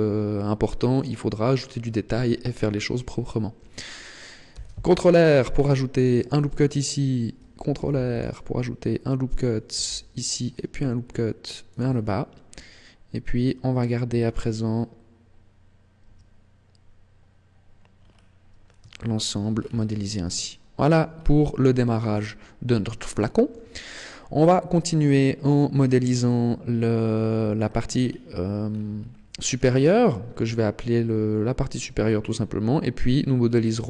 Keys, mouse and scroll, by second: 1.5-3.4 scroll up 2, 4.4 ctrl+r, 6.2 click, 7.7 ctrl+r, 9.3 click, 9.7 ctrl+r, 11.8 click, 16.0 Tab, 17.9 scroll down 6, 18.8 shift+middle click, 19.4 scroll down 2, 20.4 shift+middle click, 21.0 scroll up 2, 21.6 shift+middle click, 22.2 scroll up 2, 23.0 shift+middle click, 23.8 scroll up 2, 25.6 scroll down 2, 27.6-28.3 scroll down 6, 28.6-29.0 scroll up 8, 29.5 scroll down 2.